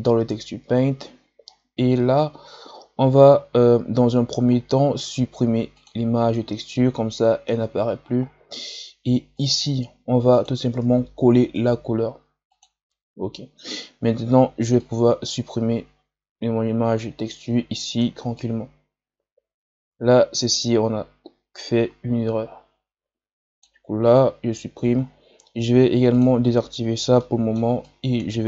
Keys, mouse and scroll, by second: 0.0 click, 5.8-12.4 drag, 13.7-14.7 scroll up 2, 14.7-17.3 drag, 17.3 f, 18.3-21.4 drag, 25.7-26.1 scroll down 10, 26.1 click, 26.8 scroll up 2, 27.2 middle click, 27.7-28.4 drag.